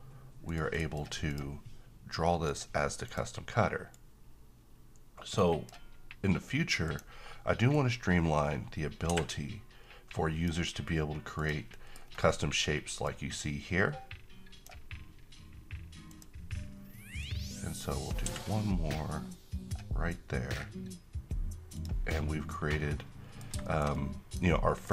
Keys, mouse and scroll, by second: 0.4 right click, 1.3-5.8 drag, 11.3 click, 11.7 middle click, 12.0-13.1 scroll up 1, 13.1-14.6 drag, 21.7 click, 22.2-23.9 middle drag.